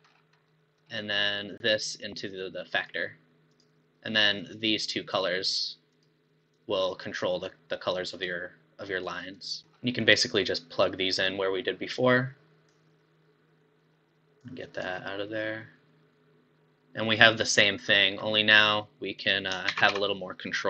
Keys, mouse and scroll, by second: 0.5-1.6 middle drag, 1.6 click, 3.5 click, 5.9 click, 8.1 click, 9.6-10.6 middle drag, 10.6 click, 14.4 click, 17.2 middle click, 17.9 scroll up 5, 18.3 middle click, 18.8-19.2 scroll up 3, 19.2 click, 19.8 shift+a.